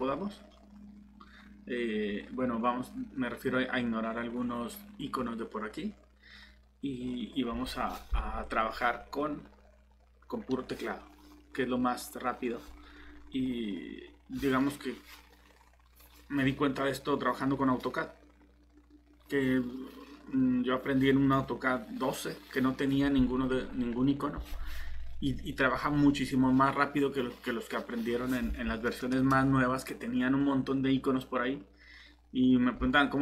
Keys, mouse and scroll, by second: 7.0-7.3 scroll down 1.